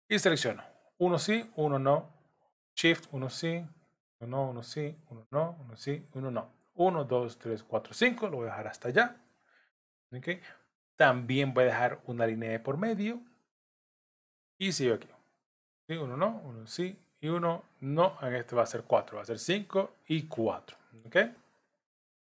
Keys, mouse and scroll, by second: 0.1 scroll up 1, 0.3 click, 3.0 shift+click, 4.4 shift+click, 14.9 shift+click, 15.9 shift+click, 20.8 middle click.